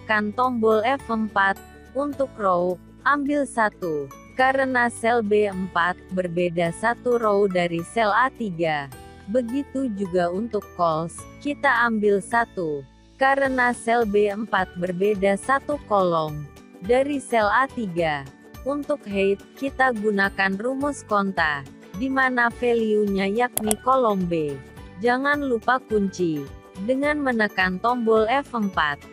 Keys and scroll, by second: 25.0 F4.